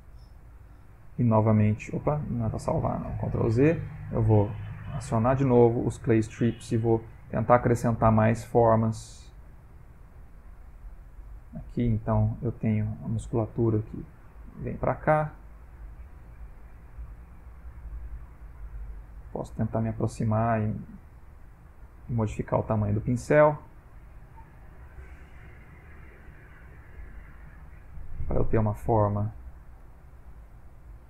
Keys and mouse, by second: 1.0 ctrl+s, 3.5 ctrl+z, 4.8 click, 5.9 click, 6.4 click, 6.8 click, 7.2 click, 7.7 click, 8.2 click, 8.7 click, 9.7 click, 10.2 click, 10.8 click, 12.1 click, 12.9 click, 13.6 click, 14.3 click, 14.8 click, 15.4 click, 15.9 click, 16.3 click, 16.8 click, 17.7 ctrl+middle click, 18.4 shift+middle click, 19.0 ctrl+middle click, 20.8 f, 22.4 f, 23.7 click, 24.2 click, 24.6 click, 25.0 click, 25.6 click, 26.3 click, 26.8 click, 27.5 click, 28.4 click, 28.9 click, 29.4 click, 29.9 click, 30.2 click, 30.7 click.